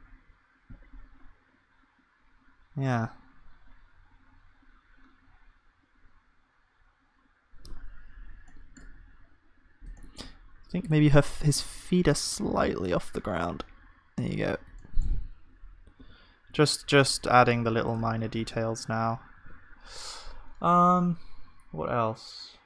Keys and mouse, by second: 12.1 g, 17.9 KP_0, 19.4 ctrl+s.